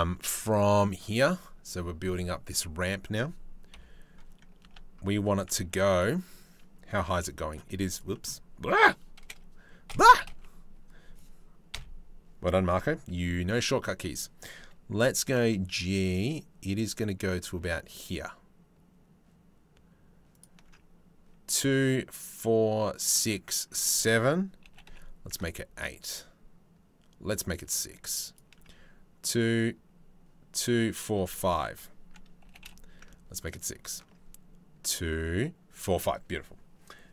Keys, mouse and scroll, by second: 3.4 KP_3, 4.3 Tab, 4.8 z, 5.4 1, 6.7 c, 7.8 click, 8.9 KP_1, 8.9 KP_4, 9.5 KP_2, 9.9 KP_1, 11.3 KP_3, 12.8 c, 14.9 g, 24.3 g, 32.1 g.